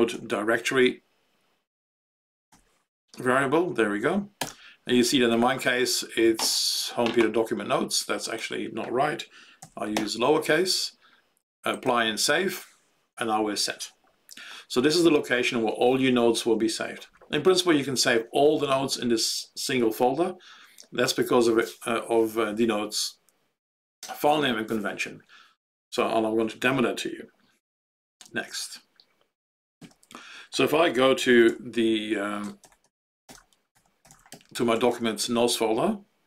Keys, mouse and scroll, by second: 0.0-0.6 typing, 1.8-3.0 typing, 4.4 alt+x, 8.2 click, 9.6 d, 9.9 Delete, 11.9 click, 29.7 q, 32.6 ctrl+BackSpace, 32.8 ctrl+BackSpace, 33.2 ctrl+BackSpace, 33.5-35.3 typing.